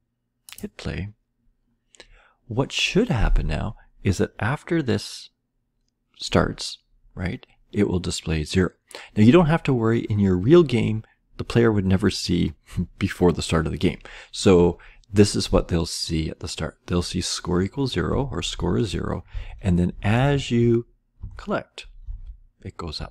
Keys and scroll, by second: 18.1 Down, 18.5 Left, 19.3 Down, 19.4 Right, 20.1 Right, 20.1 Up, 20.3 Left, 21.1 Left, 22.0 Down, 22.2-22.9 Left.